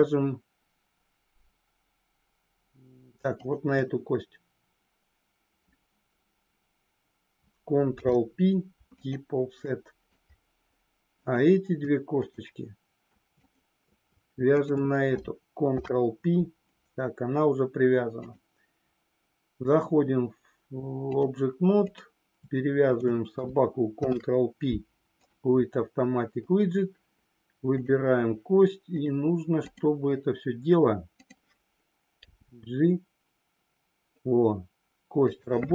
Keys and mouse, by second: 3.4 shift+click, 8.0 ctrl+p, 9.6 middle click, 11.1 click, 12.1 shift+click, 13.4 shift+click, 14.5 shift+click, 15.6 ctrl+p, 18.1-21.2 drag, 21.9 click, 22.7 shift+click, 23.9 ctrl+p, 28.9-29.9 drag, 31.1 click.